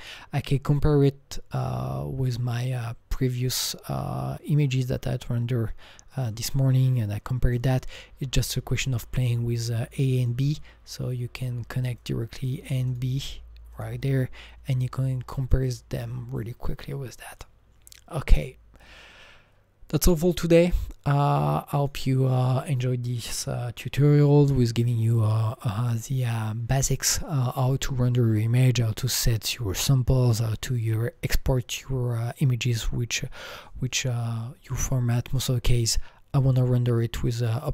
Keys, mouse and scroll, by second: 6.1-10.0 drag, 10.2-12.0 drag, 12.0 click, 12.4 click, 12.9 click, 13.3 click, 13.8-20.0 drag, 21.8-24.4 drag, 34.8 click, 34.9 click, 35.9 click, 37.5 click.